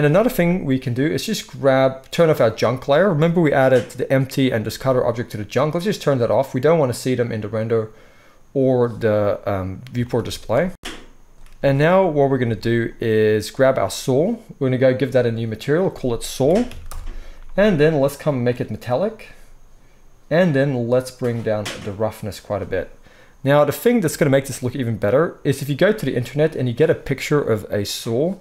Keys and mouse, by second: 0.1 ctrl+s, 3.5-5.6 middle drag, 5.6 click, 5.9-13.6 middle drag, 10.2 z, 11.3 z, 13.6 click, 14.0 middle click, 14.8-28.4 drag.